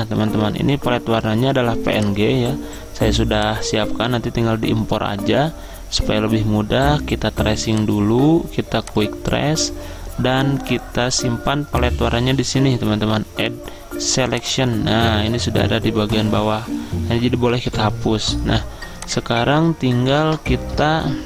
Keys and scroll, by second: 17.8 Delete, 20.2 Delete.